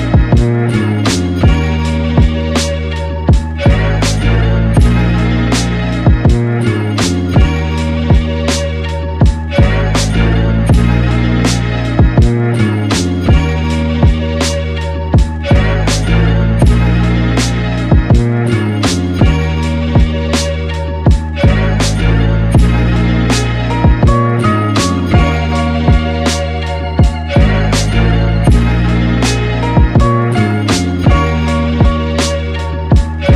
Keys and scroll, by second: 32.0-33.2 typing.